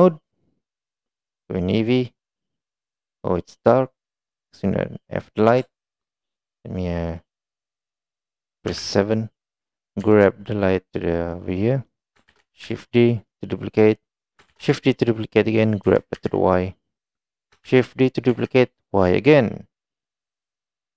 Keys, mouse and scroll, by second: 0.0 click, 2.6-2.9 middle drag, 4.7 click, 5.8 shift+middle click, 6.5 click, 7.0 middle click, 8.8 KP_7, 12.4 shift+d, 14.6 shift+d, 17.7 shift+d, 20.5-20.9 middle drag.